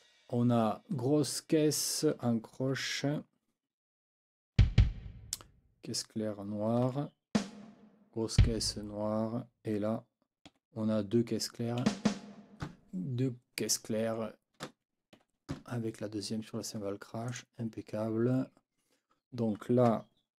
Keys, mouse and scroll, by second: 2.7 4, 4.6 b, 6.9 5, 7.3 a, 8.4 b, 10.5 4, 11.9 a, 15.2 Escape, 17.3 click.